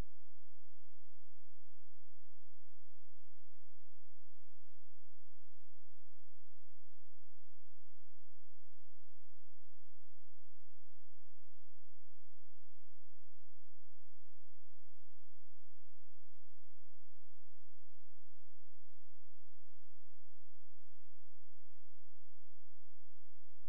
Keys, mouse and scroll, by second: 2.3 space, 2.7 click.